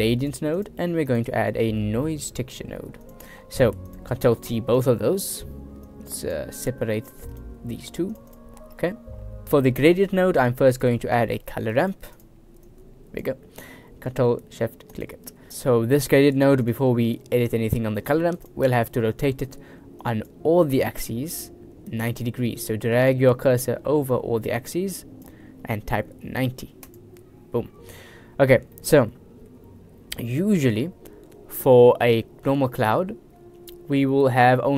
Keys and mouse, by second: 1.1 shift+a, 4.0 click, 4.5 ctrl+t, 4.8 click, 5.3 ctrl+t, 6.1-6.5 drag, 7.1 c, 7.9 g, 8.4 click, 8.9 click, 10.7 shift+a, 12.7-13.3 drag, 15.2 ctrl+shift+click, 15.5 click, 16.7 drag, 18.1 click, 18.7 click, 18.7 right click, 20.1 click, 22.1-27.0 drag, 27.7 middle click, 28.1 drag, 28.1 right drag, 28.8 click, 28.8 middle click, 28.8 right click.